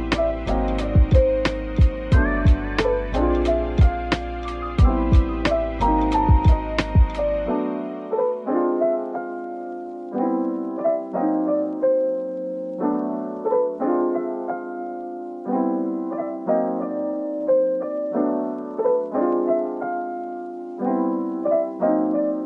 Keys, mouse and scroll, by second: 0.0-1.2 typing, 9.7 double click, 11.4 typing, 12.0 double click, 13.3 Tab, 14.3 right click, 15.7 shift+click, 16.0 right click, 17.2 Tab, 18.1 middle click, 19.6 Tab, 20.8-22.4 typing.